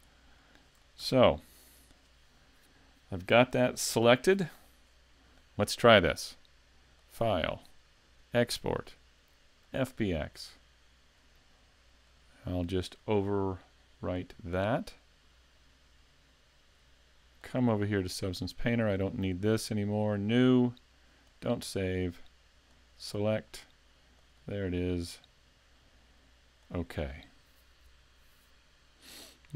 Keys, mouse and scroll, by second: 0.4 shift+middle click, 1.0 a, 1.8 right click, 7.0 click, 14.0 click.